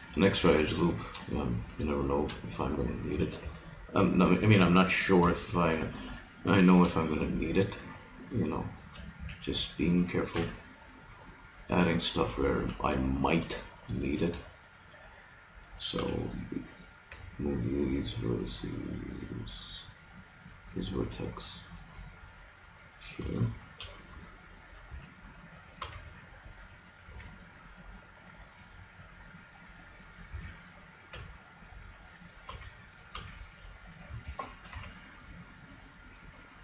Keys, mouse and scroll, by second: 3.5 b, 6.8 shift+v, 9.2 a, 10.4 ctrl+r, 12.3 click, 12.6 a, 16.0 b, 17.2 g, 23.4 middle click, 24.3 middle click, 25.0 a, 25.8 b, 27.1 g, 30.3 click, 30.4 a, 31.2 b, 32.5 b, 33.2 b, 34.8 g.